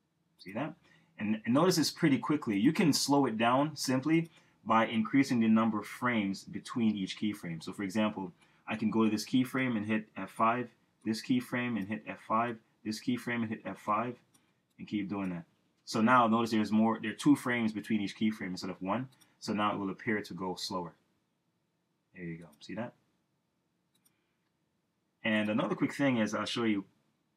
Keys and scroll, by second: 1.6 Return, 10.6 F5, 21.0 Return.